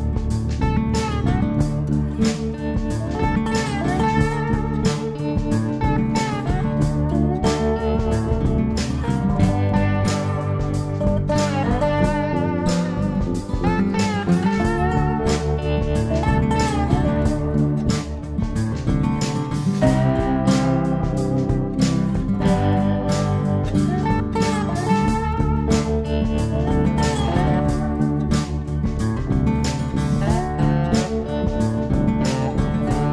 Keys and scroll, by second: 9.9-11.0 typing, 11.7 Delete, 12.5-13.9 typing, 24.0-25.0 typing, 29.3 ctrl+d, 30.8 Page_Down, 31.8 Page_Up, 32.2 Page_Down.